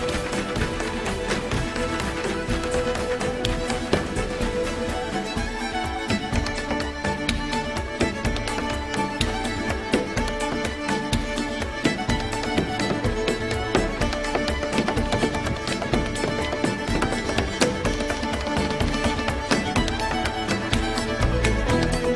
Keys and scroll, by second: 21.4 super+j.